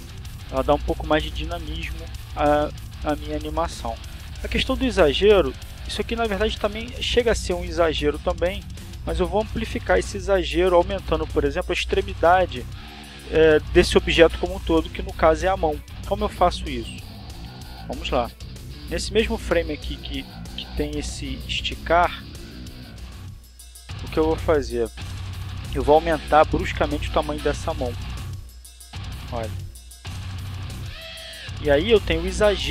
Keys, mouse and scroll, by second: 3.0-3.8 drag, 4.3 shift+click, 4.4-5.8 shift+middle drag, 6.8 click, 19.4 right click, 22.2 click, 28.1 s, 29.9 click, 30.8-32.7 drag.